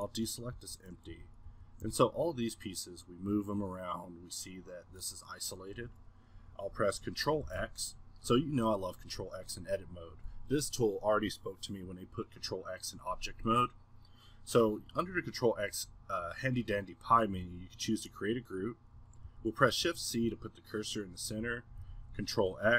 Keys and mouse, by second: 1.2 z, 1.5 z, 1.9 g, 2.8-4.8 middle drag.